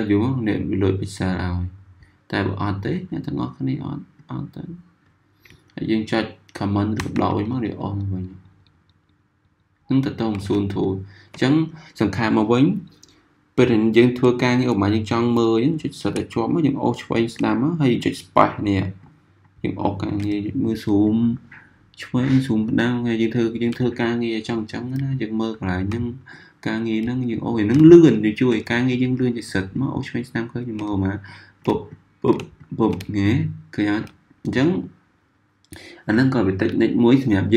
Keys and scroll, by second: 6.9 super+-, 7.6 super+-, 8.1 super+-, 8.7 super+-, 9.2 super+-, 10.0 super+-, 14.5 z, 20.2 z, 25.0 z, 32.9 typing.